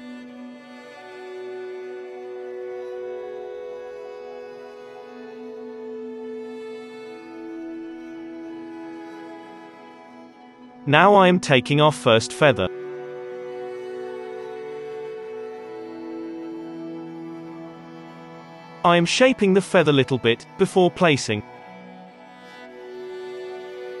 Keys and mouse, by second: 1.6 middle click, 1.6 KP_3, 2.1 click, 2.8-4.2 middle drag, 4.2-5.4 drag, 4.7 ctrl+z, 5.4 middle click, 5.6 Escape, 5.7 click, 6.2 d, 6.4-8.2 drag, 7.7 alt+a, 8.2 ctrl+s, 8.6 KP_7, 8.8 middle click, 9.4-11.1 drag, 10.9 ctrl+2, 12.1 Tab, 12.1-13.5 drag, 12.3 z, 12.8 z, 13.7 z, 14.1 alt+a, 14.4-15.6 middle drag, 15.6-18.0 drag, 15.6 g, 17.6-18.0 ctrl+z, 17.6-19.2 middle drag, 18.3-24.0 drag, 18.5 g, 19.2 g, 21.2 alt+a, 21.5-23.6 typing, 21.8 alt+a.